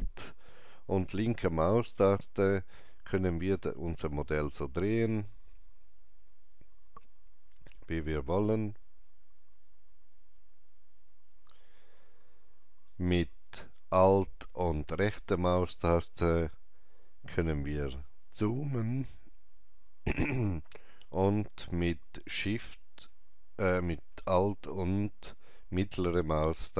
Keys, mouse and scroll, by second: 0.7 click, 1.1-24.0 alt+drag, 15.0 alt+right click, 22.6 shift+middle click, 24.0 shift+middle click.